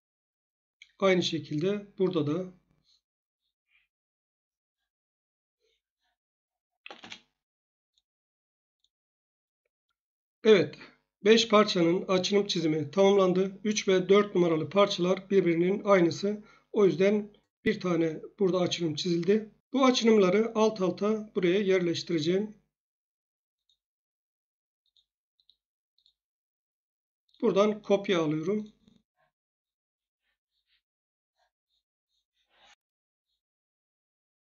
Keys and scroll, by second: 3.6 Escape, 6.8 z, 6.9 Return, 32.1-32.9 typing.